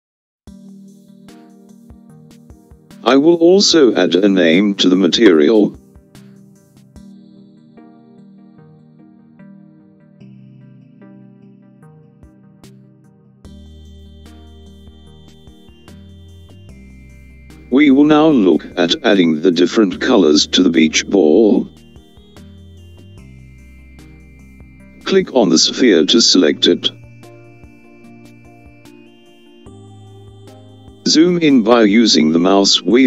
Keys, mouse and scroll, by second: 2.2-4.8 scroll up 4, 4.8 click, 5.1-8.9 drag, 26.5 click.